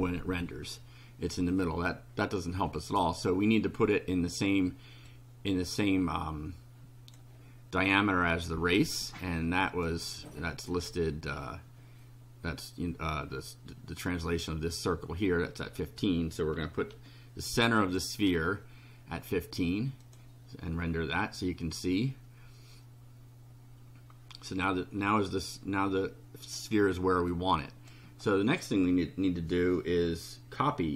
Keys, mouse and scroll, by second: 2.8 click, 5.0-7.3 drag, 9.7 click, 16.6 1, 16.9 5, 17.8 click, 20.0 click, 24.6-26.7 drag, 27.3-28.0 drag.